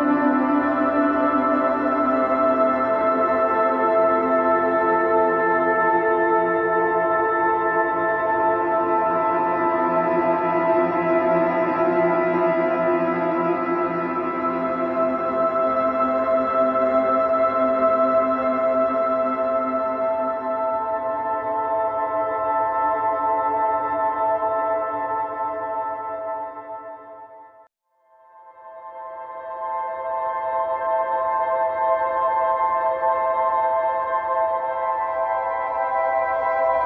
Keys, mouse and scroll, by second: 1.7 r, 3.4 g, 5.9 click, 6.8 g, 8.6-10.6 middle drag, 12.2 click, 12.5-13.8 middle drag, 13.8 a, 14.5 click, 15.2 g, 18.5-19.5 middle drag, 19.5 click, 21.0 click, 22.9 click, 24.0-26.0 middle drag, 27.1-28.5 drag, 28.5 r, 30.9-32.9 middle drag, 33.5 middle click, 33.9 click, 34.2-35.4 middle drag, 35.4-36.4 drag, 36.4-36.8 middle drag.